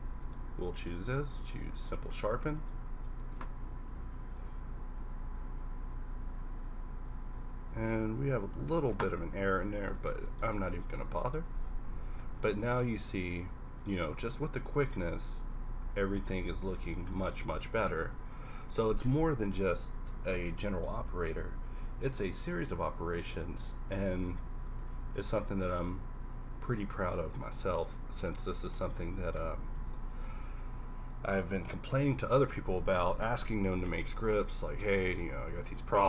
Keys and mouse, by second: 0.6 q, 4.4-6.2 drag, 8.7-9.9 middle drag, 9.9 a, 11.8 KP_5, 14.5 middle click, 17.9 shift+z, 18.6 shift+z, 19.5 shift+a, 21.9 g, 22.6 r, 24.2 g, 25.0 r, 26.0 r.